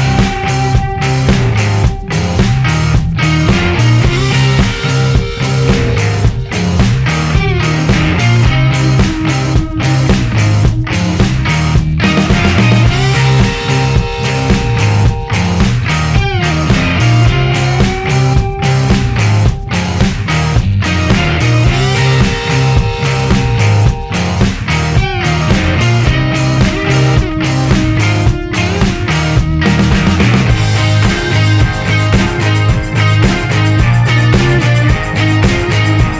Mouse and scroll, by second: 0.3 click, 0.6-3.3 right drag, 6.8 click, 7.6 click, 11.0 click, 13.2 click, 15.4 click, 15.8 click, 16.6 click, 20.1 click, 22.1 click, 24.4 click, 25.7 right click, 27.1 click, 30.2 click, 32.0 click, 33.4 click, 34.8 click.